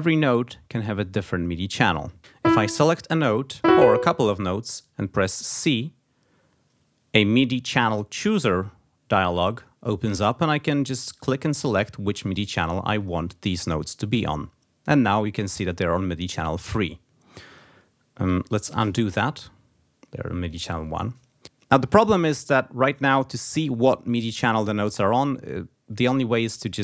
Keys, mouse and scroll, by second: 2.3 click, 3.4 click, 5.3 c, 8.2-9.5 drag, 10.9 click, 12.0 click, 12.8 click, 17.3 click, 18.6 ctrl+z, 20.3 click.